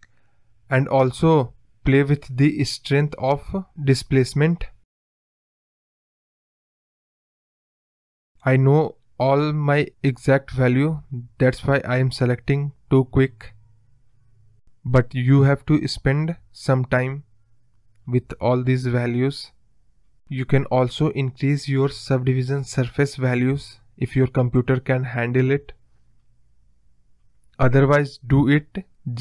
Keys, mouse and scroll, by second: 0.8 click, 2.8-5.1 drag, 8.3-10.6 drag, 11.0-13.7 drag, 15.3 click, 20.4 space, 22.5 click, 23.9 click, 26.2-28.2 drag, 28.3 space, 28.5 space.